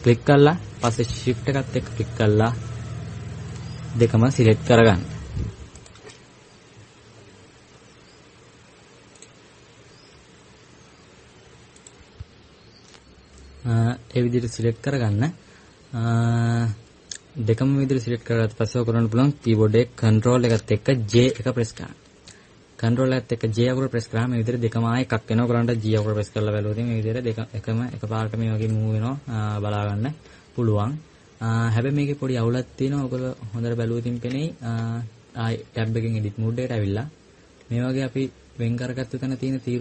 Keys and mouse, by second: 26.7 g, 34.1 KP_Add, 34.5 KP_Add, 34.9 KP_Subtract, 35.5 Tab, 36.3 Tab, 36.6 Tab.